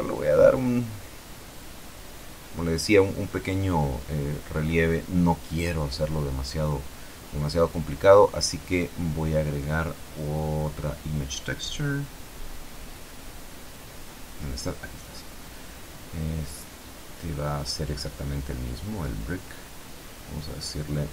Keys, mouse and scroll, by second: 5.0-6.9 drag, 9.3 shift+a, 15.7 click, 16.7 click, 17.3 middle click, 18.4 click, 19.7 click.